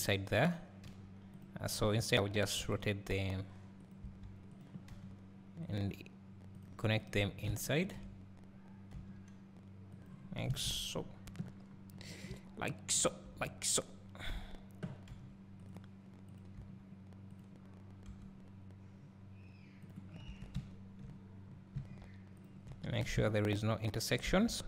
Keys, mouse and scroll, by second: 0.0 click, 0.9 g, 1.7 click, 2.7 r, 3.9 right click, 3.9 click, 6.7 click, 8.9 g, 14.4 click, 15.1 g, 16.4 click, 16.7 g, 18.1 r, 20.1 scroll down 1, 20.4 Tab, 21.0 scroll down 1, 21.5 scroll up 1, 22.4 click, 23.5 shift+click.